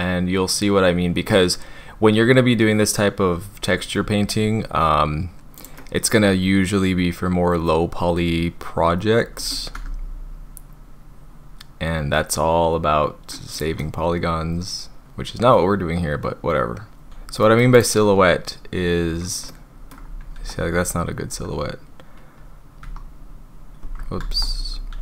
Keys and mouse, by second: 5.6 click, 5.8-9.4 middle drag, 9.7 s, 13.5 click, 13.8-17.1 middle drag, 17.1 Tab, 17.4 middle click, 17.8 click, 19.5 middle click, 19.8 click, 20.2 ctrl+z, 21.3 Tab, 22.8 a, 24.2 ctrl+z, 24.9 s.